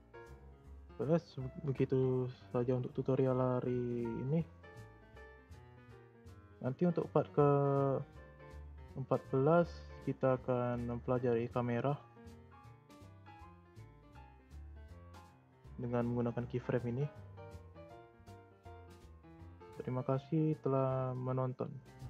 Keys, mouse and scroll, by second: 1.0 shift+scroll up 1, 1.0-4.2 shift+middle drag, 15.2-16.2 scroll down 3, 16.2-19.3 drag.